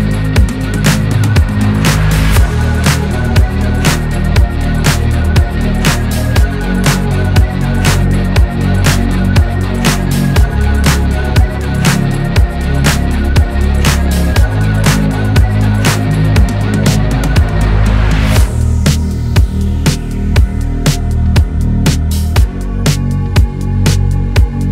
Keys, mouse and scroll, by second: 0.1 Tab, 0.5 click, 1.7 shift+a, 2.1 click, 4.2 click, 5.4 shift+middle click, 5.7-6.6 scroll up 2, 6.6 click, 8.3 Tab, 9.8-10.8 drag, 19.1 1, 20.1 click, 20.5 alt+z, 20.9 shift+middle click, 21.6 click, 21.8-22.9 shift+middle drag, 22.9 alt+z, 24.0 2.